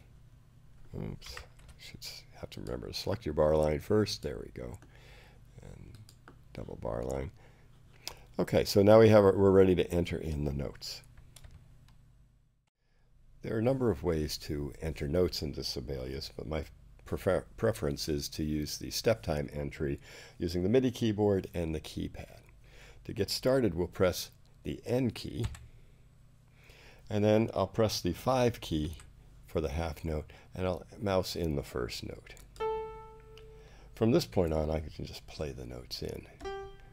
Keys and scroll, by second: 1.5 super+z, 25.4 n, 28.8 5, 34.3 4.